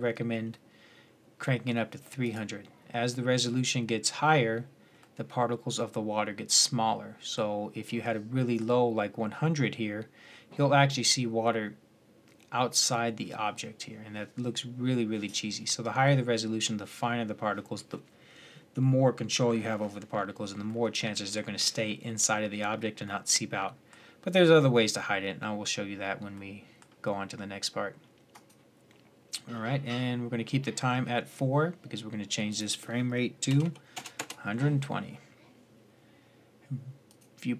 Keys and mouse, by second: 1.3 middle click, 1.4 middle click, 2.0-4.9 drag, 4.9 middle drag, 6.7-7.9 middle drag, 12.2-20.5 middle drag, 22.4-22.9 middle drag, 28.1-29.2 right drag, 29.2-33.9 drag.